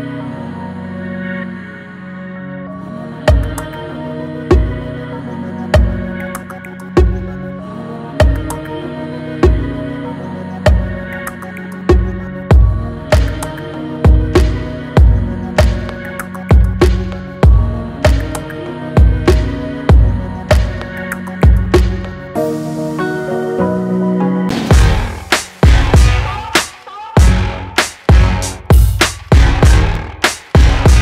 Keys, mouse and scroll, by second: 0.8 click, 3.9 click, 5.8-9.1 drag, 9.7-11.5 drag, 11.5-13.6 drag, 14.7-16.4 drag, 16.4 click, 17.8 click, 21.3 click, 24.1 click.